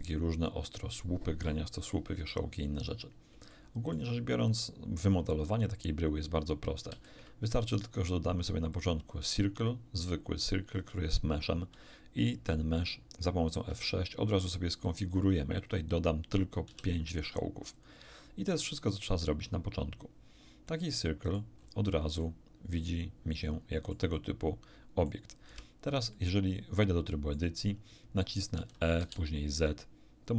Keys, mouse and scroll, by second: 3.5 shift+middle click, 6.9 shift+a, 8.7 click, 13.6 F6, 15.1 click, 15.5 click, 16.6 5, 17.7 click, 20.6-21.5 middle drag, 21.6-22.1 scroll up 1, 22.1-25.2 middle drag, 25.4 Tab, 26.1-27.5 middle drag, 28.5 e, 28.9 z.